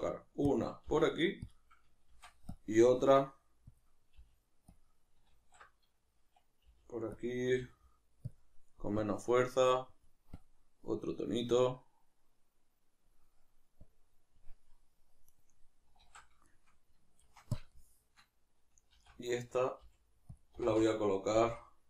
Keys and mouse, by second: 0.6 click, 0.9 g, 2.1 shift+d, 2.6 click, 2.8 r, 3.7 click, 4.1 g, 4.7 click, 5.3 alt+q, 7.2 click, 7.5 r, 15.3-16.0 right drag, 16.0 alt+q, 16.5-20.4 shift+middle drag, 17.2 shift+d, 19.0 alt+r, 20.4 click, 20.6 r.